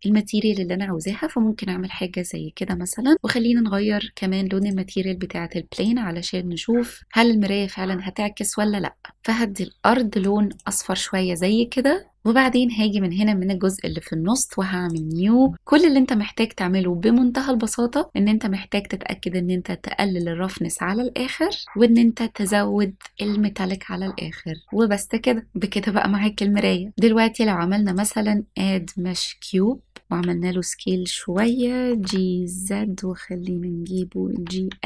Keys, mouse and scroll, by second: 1.0 click, 1.9 shift+middle click, 3.1 click, 4.7 click, 5.8 click, 10.6 click, 12.1 middle click, 12.5 click, 14.9 click, 15.5-16.5 scroll down 1, 17.7-20.2 scroll down 1, 20.2-21.6 drag, 22.0-23.8 drag, 26.9 middle click, 26.9 click, 26.9 scroll down 1, 27.9-29.8 drag, 30.2 s, 31.4 click, 31.9 g, 32.1 z, 33.9 click, 34.4 g, 34.6 x.